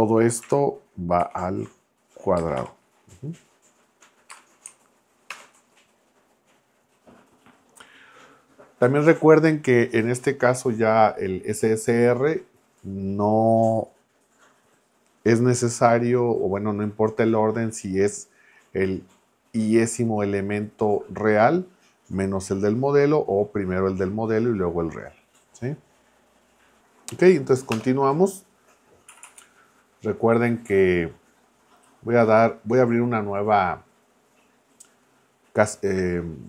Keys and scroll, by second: 1.2 shift+6, 2.3 space, 2.6 2, 4.3 space, 5.3 ctrl+Return, 27.7 Return, 29.1 Right.